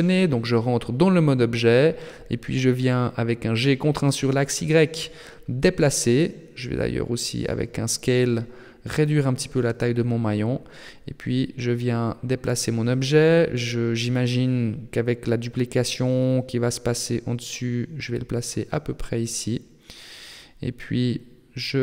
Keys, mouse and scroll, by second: 0.2 Tab, 2.7 g, 5.4 s, 7.4 scroll down 6, 8.8-10.2 scroll up 9, 10.2 shift+middle click, 10.8-11.2 scroll up 2, 11.7 g, 17.0 Tab, 17.2 Tab, 17.5 a, 20.4 click.